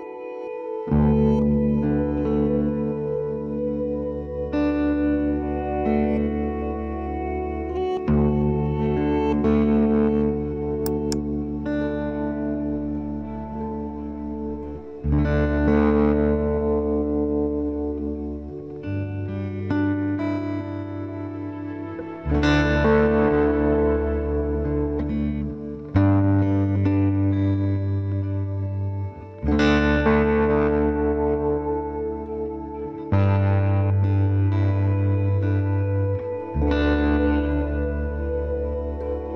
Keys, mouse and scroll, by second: 0.0 KP_Decimal, 1.0 z, 2.1 i, 4.8 middle click, 5.8-7.3 drag, 6.9 ctrl+b, 8.5 KP_3, 9.5 Tab, 10.3 z, 10.9 Tab, 14.1 ctrl+Tab, 15.9-17.8 right drag, 19.5 g, 20.8-22.2 middle drag, 22.2-24.0 right drag, 22.4 g, 25.8-29.6 right drag, 25.9 g, 26.9 g, 27.9 g, 31.2 ctrl+r, 32.2 right click, 32.4 g, 35.7 ctrl+z, 35.9 ctrl+z, 36.1 ctrl+z, 36.7 ctrl+z.